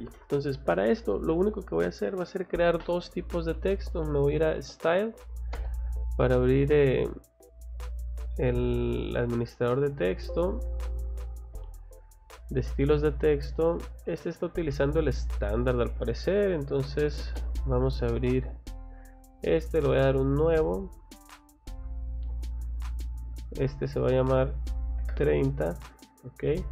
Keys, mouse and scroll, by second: 3.6 s, 4.1 y, 4.6 e, 5.5 Return, 8.3 click, 10.1 click, 10.5 Escape, 11.0 click, 13.3 click, 15.8 Escape, 16.7-17.5 typing, 20.1 click, 21.2-23.8 drag, 24.0 click, 26.2 click.